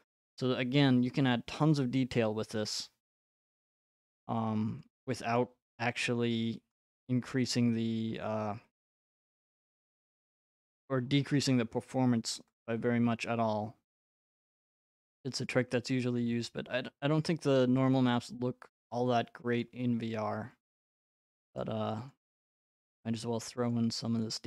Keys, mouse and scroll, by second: 1.3 right click, 2.7 click, 4.0 click, 4.8 click, 5.4 click, 5.9 click, 6.7 click, 7.5 click, 8.2-8.8 scroll, 9.9 right click, 10.2-11.0 scroll, 11.0-11.9 scroll, 14.3 click, 15.5 click, 16.2 click, 17.1 click, 17.7-18.1 scroll, 18.3 scroll, 19.6 right click, 19.9-20.7 scroll, 20.7 click, 20.7-21.1 scroll, 21.1 click, 21.6 click, 22.1 click, 22.6 click, 23.2 click, 23.7 click, 24.2 click.